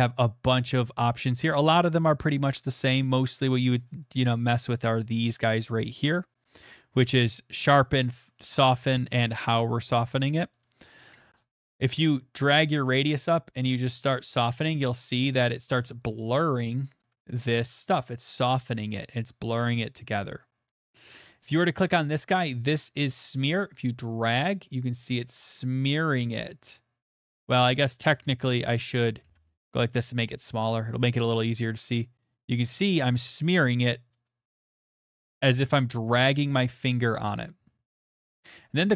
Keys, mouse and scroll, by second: 9.1 click, 10.6 click, 12.4 click, 13.9 click, 15.1 middle click, 15.3 middle click, 15.4 middle click, 15.4 middle click, 15.8 middle click, 15.9 middle click, 15.9 middle click, 17.9 click, 21.8 click, 22.7 middle click, 23.3 middle click, 25.8 click, 27.4 middle click, 28.2 ctrl+z, 29.0 middle click, 29.2 ctrl+z, 30.1-31.0 [, 32.9 [, 35.4 click, 36.9 click, 38.3 click.